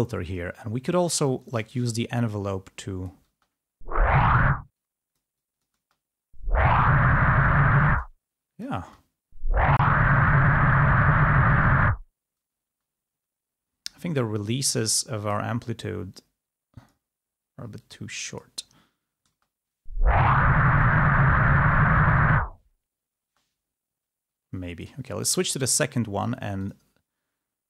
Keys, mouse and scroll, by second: 1.5 click, 2.5-3.6 drag, 3.6 space, 4.5 space, 4.8-6.0 drag, 6.0 space, 7.9 space, 8.0 click, 8.9 space, 12.7 space, 15.3 click, 16.1-17.2 drag, 17.8 click, 19.4 space, 23.4 space, 24.9 click, 26.6 click.